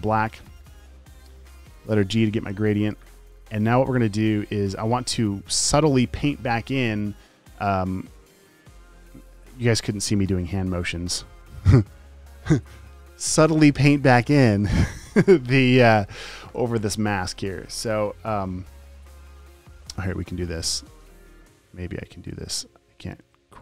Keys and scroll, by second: 2.3 g.